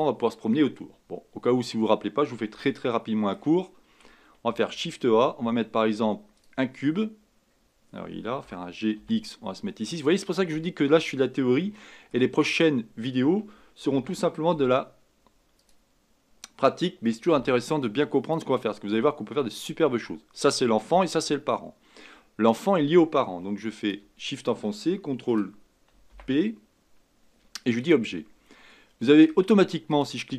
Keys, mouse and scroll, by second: 1.6-1.9 scroll down 2, 2.6-4.4 shift+middle drag, 4.4 shift+a, 7.4 scroll down 1, 8.4 g, 10.7-11.7 scroll up 3, 11.7-12.3 shift+middle drag, 12.3-13.9 scroll up 4, 13.9 shift+d, 17.3 s, 18.7-21.7 middle drag, 23.8 shift+click, 26.1 ctrl+p, 28.7-29.9 middle drag, 29.9 click.